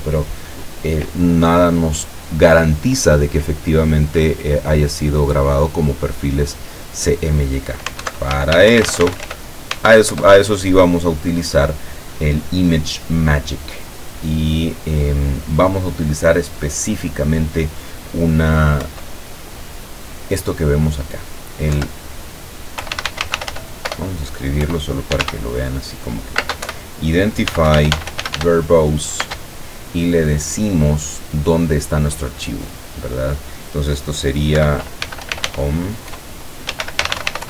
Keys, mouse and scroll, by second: 8.1 alt+F2, 8.3 alt+g, 8.6 alt+n, 8.7 alt+o, 8.9 alt+m, 9.0 alt+-, 9.2 alt+e, 9.3 alt+r, 9.8 alt+Tab, 10.2 Return, 18.8 Up, 21.8 Down, 22.6-29.3 typing, 34.4-37.4 typing.